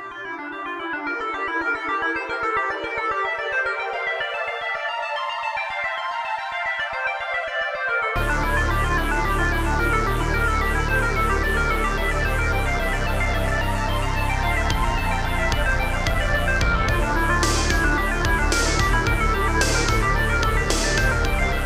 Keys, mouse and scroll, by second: 0.9 click, 1.2 click, 1.4 ctrl+c, 2.0 Right, 2.3 ctrl+v, 3.8 middle click, 4.7 middle click, 5.5 Left, 5.9 Right, 6.2 Right, 7.9 Right, 7.9 Left, 8.7 Left, 8.7 scroll down 2, 9.5 shift+middle click, 11.7 click, 11.9 click, 13.2 shift+click, 14.7 shift+click, 15.7 7, 16.7 scroll up 2, 17.1 g, 18.2 click, 18.5 middle click, 18.5-19.0 scroll, 19.5 1, 20.1 Left, 20.4 Left, 20.8 Right, 21.2 Right, 21.5 ↔.